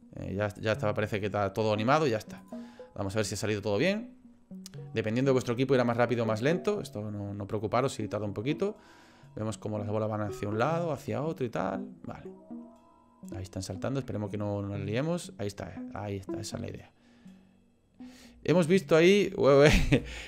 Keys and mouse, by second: 0.6 click, 2.4 click, 20.0 space.